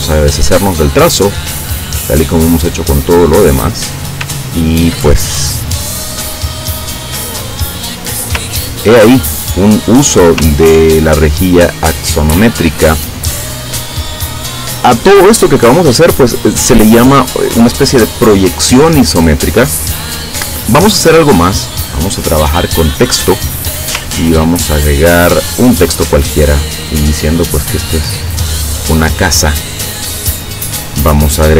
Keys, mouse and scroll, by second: 0.7 click, 2.2 click, 2.9 click, 4.5 ctrl+scroll down 2, 6.7-7.8 drag, 8.6-9.5 ctrl+scroll down 2, 9.6 click, 10.7 ctrl+scroll down 2, 21.5 click, 22.4 middle click, 24.5-24.8 ctrl+scroll down 2, 25.1 ctrl+scroll up 2, 28.2-31.5 drag.